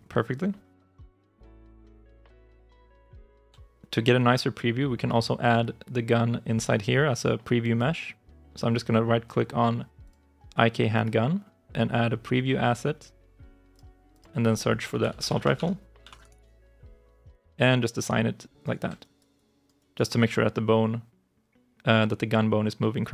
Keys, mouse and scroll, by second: 3.1 alt+click, 10.8 right click, 14.0 double click, 14.4-16.7 typing, 18.9 alt+right click, 19.2 alt+click, 19.6 alt+right click, 22.8 alt+click.